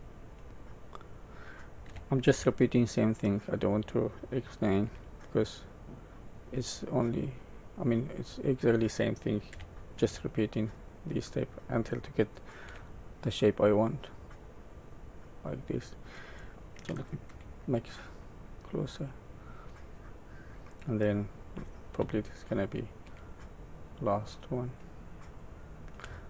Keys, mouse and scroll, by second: 2.4 e, 5.0 s, 9.5 e, 12.6 s, 17.2 KP_Decimal, 18.0-20.1 scroll down 9, 21.9 e, 26.0 s.